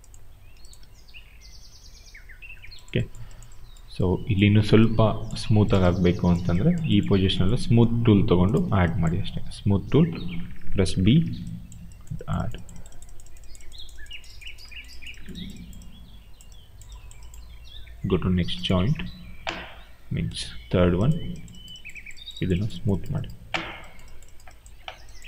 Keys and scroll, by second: 0.7 e.